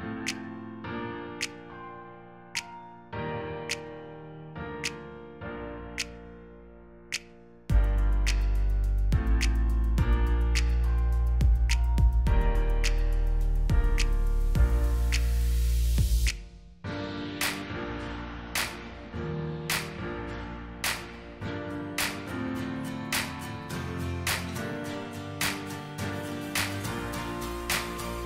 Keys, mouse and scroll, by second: 2.0-2.7 alt+scroll down 1, 3.4-3.7 alt+scroll down 2, 4.2 alt+scroll up 1, 4.7 space, 7.5 alt+shift+click, 12.1 alt+shift+click, 15.6 alt+scroll up 1, 17.6 alt+click, 20.6 ctrl+d, 20.8-23.1 ctrl+d, 24.8 alt+scroll down 1, 25.6 space, 27.8-28.1 alt+scroll down 1.